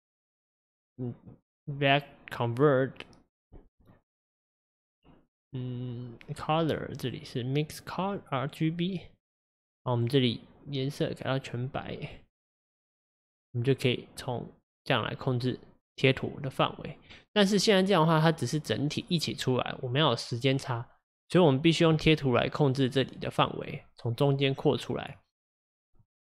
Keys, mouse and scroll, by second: 9.4-10.3 scroll up 1, 10.3 click, 12.7-15.7 drag, 23.3 click.